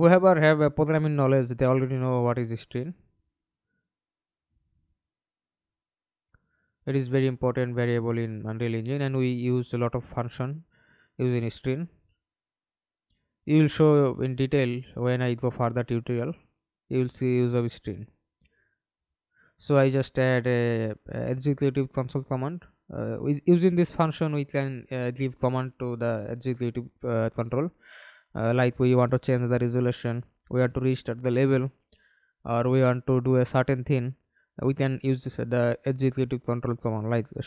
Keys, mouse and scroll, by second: 4.6 right click, 16.1 Delete, 18.7-20.6 typing, 20.7 Return, 26.3 double click, 31.5-36.1 typing.